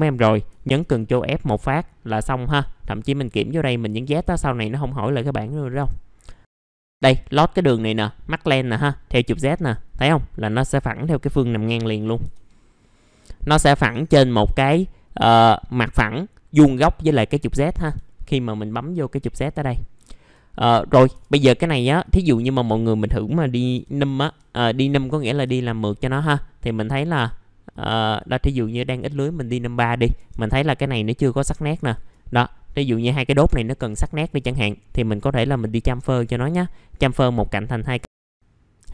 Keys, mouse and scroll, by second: 2.8-4.8 drag, 5.4 middle click, 6.4 click, 11.7 i, 12.6 scroll down 1, 14.0 click, 15.5 alt+middle click, 18.0 alt+middle click, 20.0 alt+middle click, 22.0 click, 23.7 l, 24.8 middle click, 25.4-27.7 scroll down 1, 27.7 click, 28.6 middle click, 29.2-29.5 scroll up 1, 29.5 middle click, 30.6 click, 31.7 ctrl+click, 32.1-33.6 scroll down 1, 33.6-34.2 scroll up 1, 34.5 right click, 36.4 click.